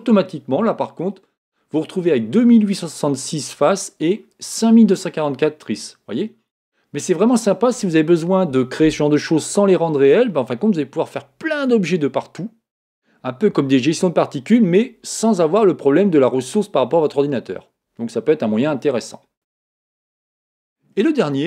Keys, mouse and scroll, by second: 6.1 middle click, 6.5 scroll up 1, 6.7-9.2 middle drag, 8.3-8.7 scroll up 1, 8.7-9.2 scroll down 1, 20.2-21.4 middle drag, 20.2-21.4 scroll down 1.